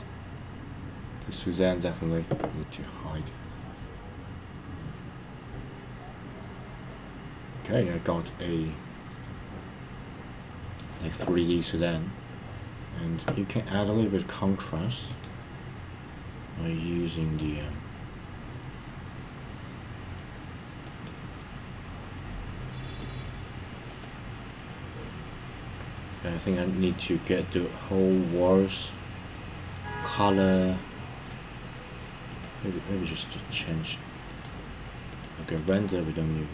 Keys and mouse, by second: 1.1 click, 2.8-10.8 middle drag, 15.1-18.0 drag, 20.9-26.1 drag, 30.1-31.2 drag, 32.3 click, 33.5 click, 34.3 click, 35.0 click, 35.5 click.